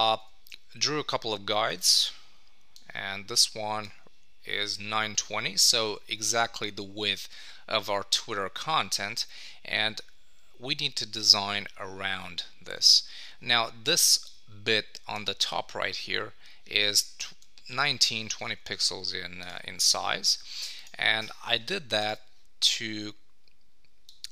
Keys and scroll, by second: 9.2 super+d, 17.3 super+d, 18.5 super+Tab.